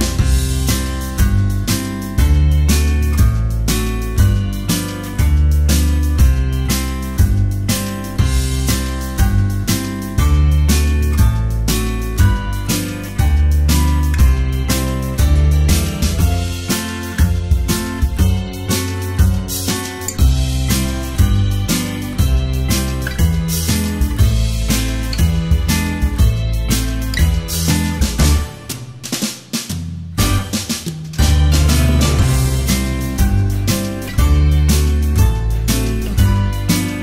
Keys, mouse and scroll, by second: 0.0-4.4 typing, 5.5 space, 6.2 space, 6.6 space, 6.9 space, 8.7 space, 9.6 space, 10.1 space, 10.4 space, 11.5 space, 12.8 space, 13.9 space, 15.0-18.5 typing, 19.7-26.6 typing, 27.8 space, 29.5 space, 32.5 space, 33.0 space, 33.5 space, 35.2 space, 36.0 space, 36.8 space.